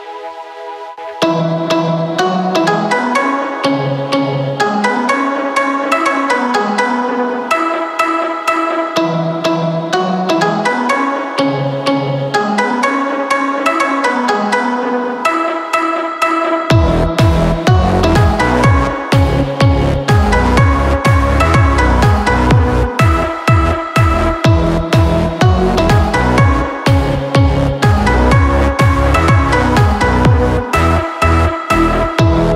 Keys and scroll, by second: 0.5 ctrl+t, 4.1 Return, 7.4 b, 9.2 ctrl+KP_Add, 9.4 ctrl+KP_Add, 15.9 space, 17.7 typing, 20.5 space, 26.1 space.